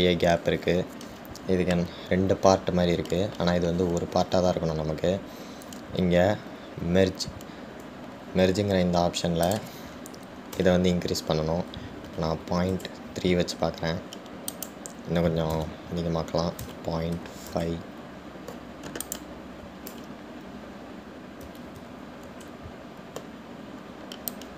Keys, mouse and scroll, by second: 10.7-13.8 drag, 15.7-18.8 drag, 20.3-23.3 drag.